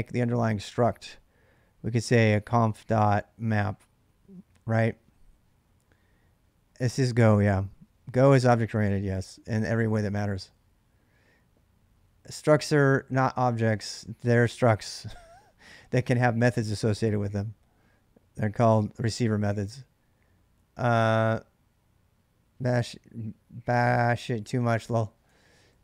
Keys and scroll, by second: 3.0-4.0 typing, 12.2 ctrl+[, 12.3 ctrl+j, 12.4 k, 24.8 ctrl+[, 25.1-25.5 typing.